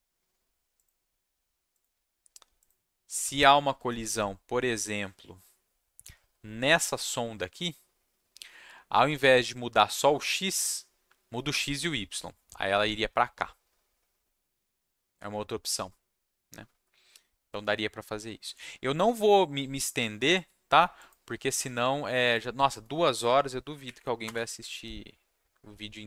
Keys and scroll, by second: 23.8 Up, 24.2 Return.